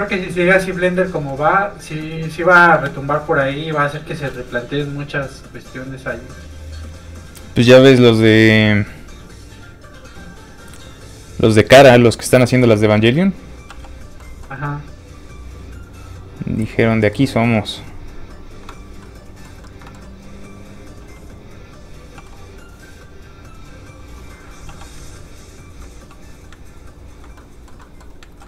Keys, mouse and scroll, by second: 2.8 shift+space, 4.0 shift+click, 5.6 click, 6.8 click, 13.7 f, 13.9 click, 14.2 middle click, 14.9 click, 19.0 middle click, 22.2 f, 22.4 click, 24.7 f, 24.8 click, 25.9 ctrl+f, 26.1 click, 26.5 ctrl+click, 27.4 click, 27.5 middle click, 28.3 ctrl+z.